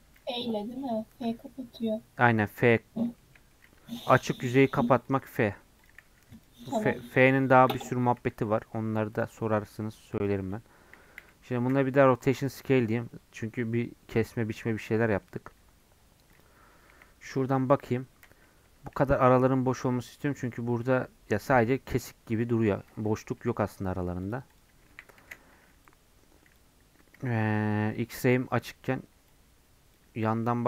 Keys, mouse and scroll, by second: 0.1 click, 0.4 middle click, 1.0 scroll up 1, 1.3 middle click, 1.8-3.2 drag, 3.2 shift+middle click, 3.8 Tab, 4.0 3, 4.2 click, 4.6 Tab, 5.1 click, 5.3 Tab, 5.9 click, 6.4 x, 7.2 2, 7.3 click, 7.7 f, 8.3 Tab, 8.4 scroll down 1, 8.6 middle click, 9.1 click, 9.3 middle click, 9.6 scroll up 1, 9.8 middle click, 10.1-11.2 drag, 11.2 a, 12.5 ctrl+a, 14.1 click, 14.6-15.6 middle drag, 15.6-16.3 scroll up 1, 16.3 click, 16.9 KP_1, 17.9-18.5 scroll up 3, 18.5-20.0 scroll down 1, 20.0-24.2 scroll down 1, 24.2 click, 24.7 Tab, 25.2 alt+z, 26.6 click, 30.0 click, 30.1 scroll up 1, 30.4 shift+middle click.